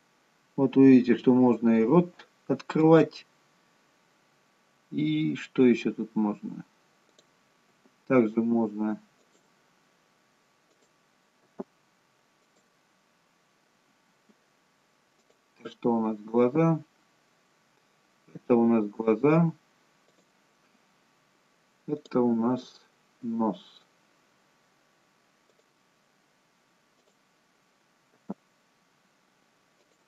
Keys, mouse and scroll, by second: 7.1 click, 8.2 g, 10.8 click, 11.7 g, 15.3 click, 16.9 g, 22.1 click, 23.3 g, 27.1 click, 28.2 g.